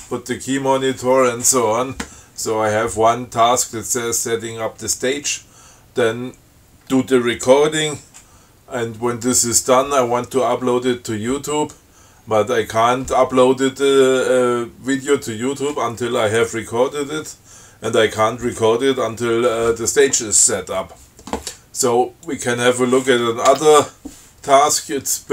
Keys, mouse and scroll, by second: 22.5 click.